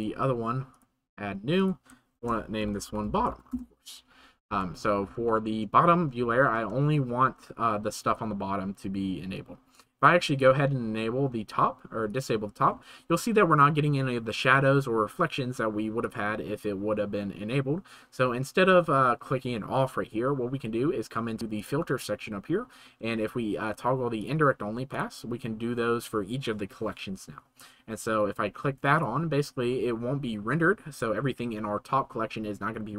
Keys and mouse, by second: 1.6-3.5 shift+right drag, 5.2 shift+middle drag, 6.9-7.4 shift+middle drag, 9.3-12.6 drag, 9.4 c, 16.0 click, 21.6-24.9 drag, 29.0-32.9 drag.